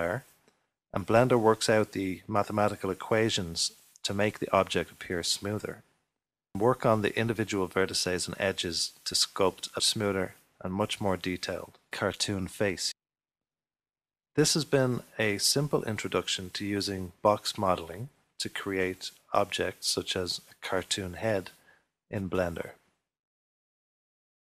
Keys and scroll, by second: 2.3-4.8 typing, 6.6 s, 8.2 ctrl+3, 10.7-12.3 typing, 12.4 ctrl+r, 16.9 ctrl+r, 17.7 3, 20.5 3, 21.2 super+z, 22.5 3.